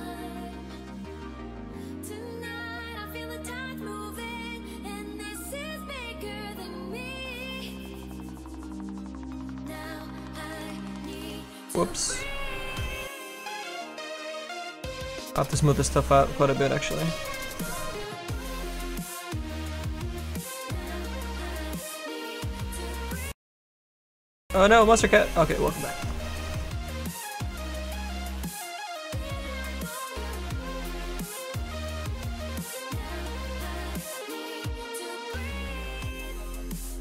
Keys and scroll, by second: 31.5 s, 33.8 ctrl+z.